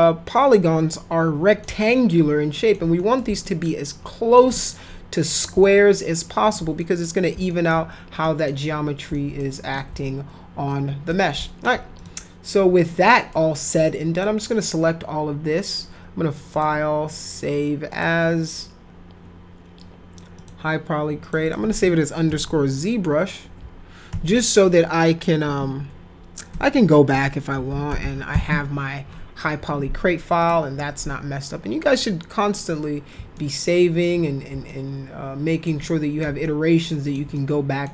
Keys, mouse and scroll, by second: 0.9 middle click, 1.9 alt+middle click, 3.0 middle click, 3.4 alt+middle click, 4.5 middle click, 5.6 alt+middle click, 6.8 middle click, 7.5 alt+middle click, 8.2 middle click, 9.1 alt+middle click, 10.1-11.1 alt+middle drag, 11.3 alt+middle click, 12.0 click, 12.9 middle click, 13.7 click, 16.5 click, 17.9 click, 20.4 click, 21.2 click, 21.5 click, 22.2 shift+F11, 24.1 shift+-, 26.5 Caps_Lock, 26.8-28.8 typing, 30.4 click, 33.4 alt+middle click, 34.7 alt+middle click, 35.8 middle click, 36.5 ctrl+alt+middle click, 37.3 middle click.